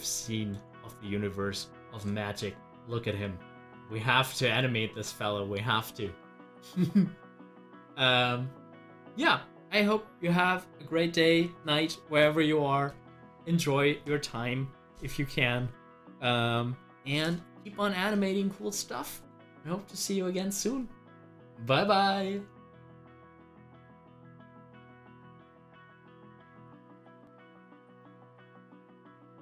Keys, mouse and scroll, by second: 0.2-7.5 middle drag, 27.1 middle click, 27.2 scroll down 1, 28.6 click.